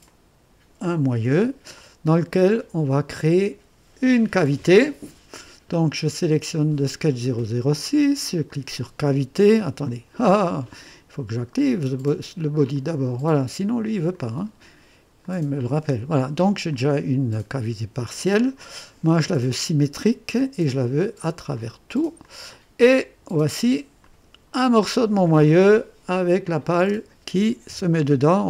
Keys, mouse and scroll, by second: 0.0-0.9 drag, 1.2 space, 1.8 click, 2.5 scroll up 1, 6.5 click, 8.5 click, 9.9 click, 12.6 click, 14.1 click, 15.2 click, 16.7-18.2 drag, 19.6 click, 20.8 click, 21.6 click, 22.3 click, 24.0 click, 24.9-25.2 scroll down 2, 26.4 click, 26.8 space, 27.7 KP_2, 28.3 click.